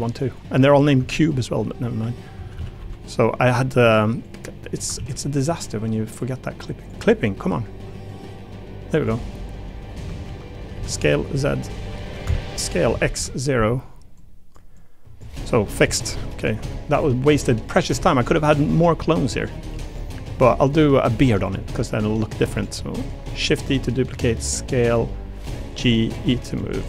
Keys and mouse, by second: 0.1 click, 0.7 click, 1.0 Tab, 2.3 a, 2.5 a, 2.8 b, 4.2 click, 4.9 ctrl+z, 6.8 click, 8.3-9.7 drag, 10.1 ctrl+z, 10.7 s, 11.0 z, 11.3 0, 12.2 Escape, 12.6 s, 12.9 x, 13.0 0, 13.1 Return, 14.2 click, 14.7 click, 15.8 alt+z, 15.9 click, 16.4 click, 16.6 Tab, 17.6 click, 17.9 click, 18.6 click, 19.4 click, 19.7 3, 19.9 click, 20.9 click, 21.2 Tab, 21.6 click, 21.9 3, 22.2 click, 22.8 click, 23.4 shift+d, 23.8 click, 24.1 s, 25.0 g, 25.8 e.